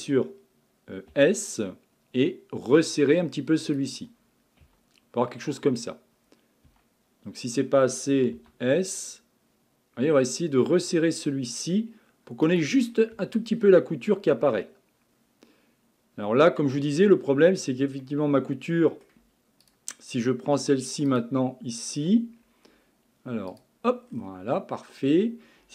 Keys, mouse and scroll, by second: 1.1 s, 4.7 Tab, 5.2-5.7 scroll down 2, 5.7-6.7 scroll up 4, 6.7 Tab, 8.4 s, 12.9-14.1 scroll down 9, 13.2 Tab, 14.1-16.9 middle drag, 16.9-18.0 scroll up 5, 18.0-19.6 middle drag, 19.6 click, 21.1 click, 22.4-23.5 scroll up 5, 23.5 click, 24.1 scroll down 6.